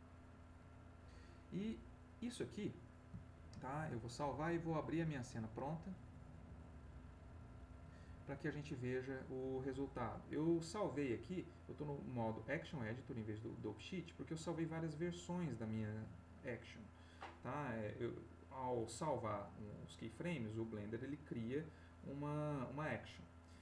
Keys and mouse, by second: 3.5 ctrl+s, 5.2 click, 6.8 click, 12.6 click, 20.6 click.